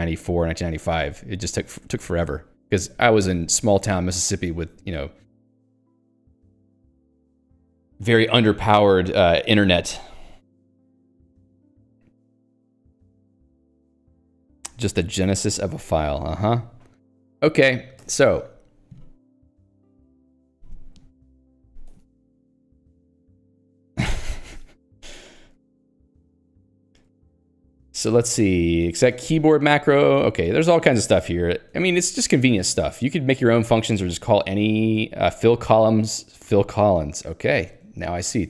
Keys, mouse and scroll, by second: 14.4 Escape, 18.1 Escape, 18.2 click, 19.6 click, 20.1 click, 20.6 click, 21.9 Escape, 25.5 j, 26.1 Escape, 26.5 j, 28.9 ctrl+d.